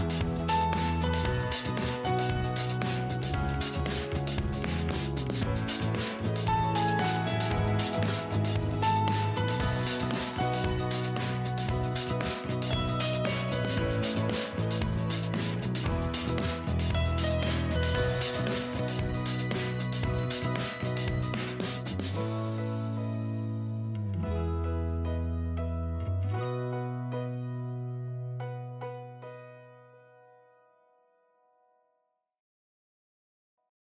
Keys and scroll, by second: 19.3 ctrl+g.